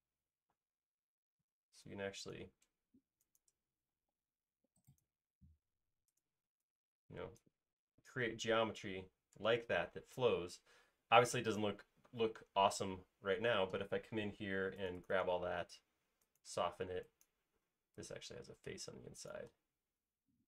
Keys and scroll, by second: 0.8 space, 3.9 m, 6.5 e, 12.1 space, 12.3 e, 13.4 typing, 14.7 space.